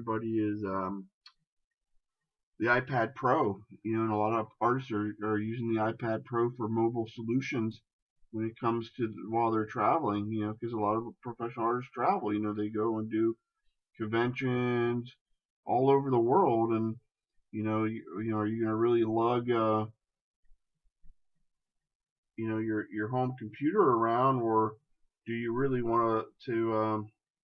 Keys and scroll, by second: 3.9 shift+space, 18.0 ctrl+z.